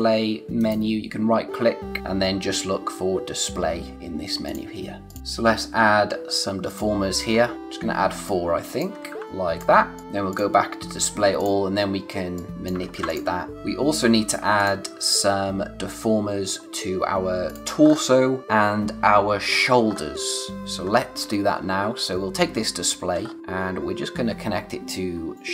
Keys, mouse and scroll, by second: 0.6 right click, 4.4 click, 5.2 space, 6.6 click, 7.3 scroll up 1, 7.7 click, 12.8 ctrl+z, 13.1 click, 13.5 space, 14.5 click, 17.4 click, 17.8-18.4 scroll up 1, 18.4 click, 19.8-20.6 scroll down 1, 20.6 click, 20.7-21.2 scroll down 1, 21.2 space, 23.2 scroll up 1, 25.3 click.